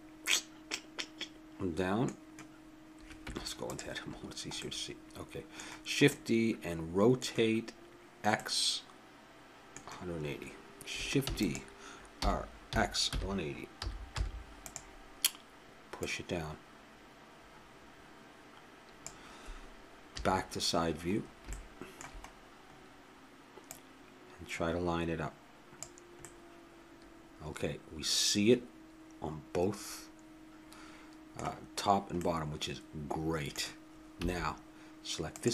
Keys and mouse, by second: 3.2 Tab, 4.6-6.1 middle drag, 6.3-9.7 middle drag, 11.3 shift+d, 12.1 r, 16.0-17.8 drag, 20.1 KP_3, 23.7-25.4 drag, 26.2-27.9 middle drag, 32.3 middle click, 34.2 a, 35.3-35.5 drag.